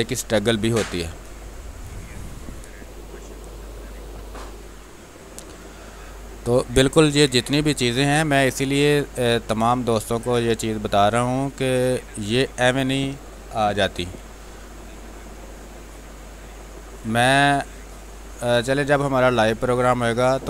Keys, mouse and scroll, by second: 1.5 click, 5.7 ctrl+space, 6.0 ctrl+click, 6.2 ctrl+space, 7.4 click, 7.7 space, 8.7-10.3 drag, 10.3 space, 10.5 click, 10.8 space, 11.6-12.9 drag, 12.9 space, 13.3 click, 13.4 space, 14.6-16.9 drag, 16.9 space, 17.1 click, 17.4 space, 18.4-20.4 drag.